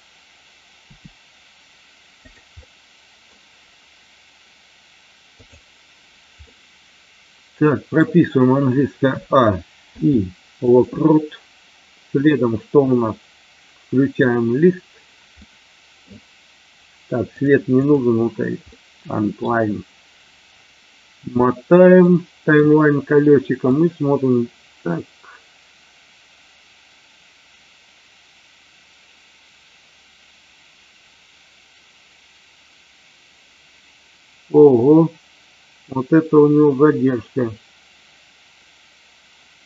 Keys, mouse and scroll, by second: 0.7 r, 2.3 click, 2.5-3.3 middle drag, 5.5 drag, 6.4-8.0 middle drag, 9.0 a, 9.8 i, 14.1 click, 15.4 middle click, 17.8 click, 18.8 middle click, 22.1 middle click, 23.7-39.6 drag.